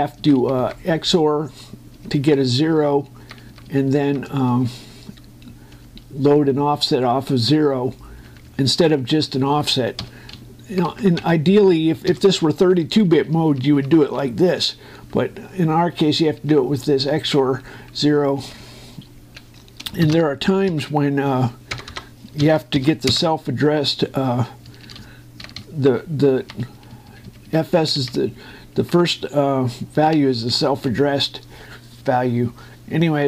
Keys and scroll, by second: 0.7 Right, 2.7 Down, 5.2 Left, 11.1 Right, 11.9 Left, 12.8 ], 13.8 Delete, 19.2 Down, 20.8 shift+s, 22.4 BackSpace, 23.2 s, 23.8 Return, 25.4 Up, 25.7 Right, 26.2 Up, 26.3 Right, 30.9 Down.